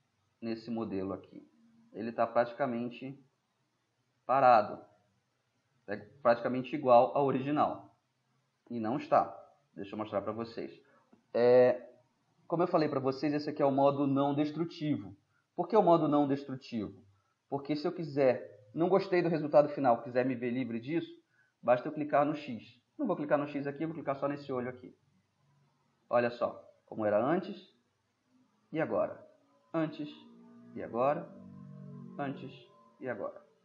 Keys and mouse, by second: 3.1-3.8 middle drag, 4.5-6.4 middle drag, 15.5-17.2 middle drag, 25.3 click, 28.5 click.